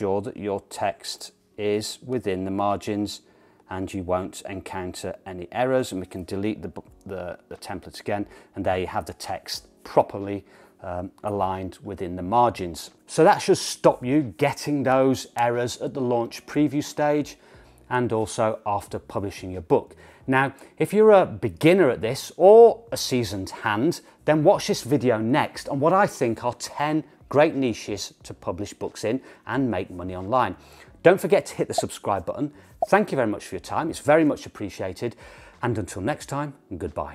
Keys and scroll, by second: 7.0 BackSpace, 7.5 BackSpace.